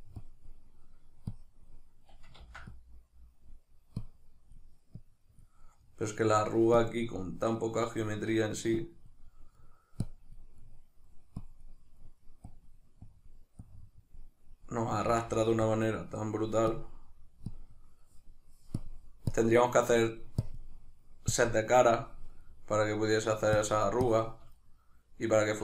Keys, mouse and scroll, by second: 2.3-5.7 drag, 2.4 ctrl+z, 5.7-6.8 middle drag, 6.8 click, 7.5-8.8 middle drag, 8.8 click, 9.5 middle click, 10.0 click, 10.6 middle click, 11.4 click, 12.0 middle click, 12.5-14.6 drag, 14.6-15.6 middle drag, 15.0 ctrl+z, 15.6 click, 16.0 middle click, 16.8-18.0 drag, 18.0 middle click, 18.8 click, 19.8 middle click, 20.4 click, 20.8 middle click, 21.3 click, 21.8-23.6 middle drag, 23.6-24.6 shift+drag, 24.6-25.6 middle drag.